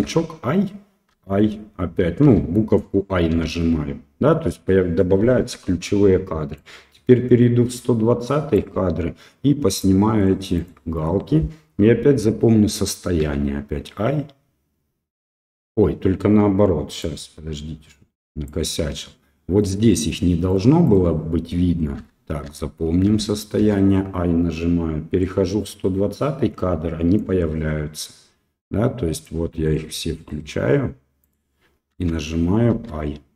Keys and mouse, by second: 0.0 i, 1.1 i, 2.3 i, 3.3 i, 6.6-8.6 drag, 9.7 click, 10.2 click, 10.6 click, 10.9 click, 17.0-18.5 drag, 19.6 click, 20.1 click, 20.5 click, 20.9 click, 22.0 i, 22.5 i, 23.1 i, 23.6 i, 25.2-27.2 drag, 29.1 click, 29.6 click, 30.2 click, 31.2 click, 32.7 i.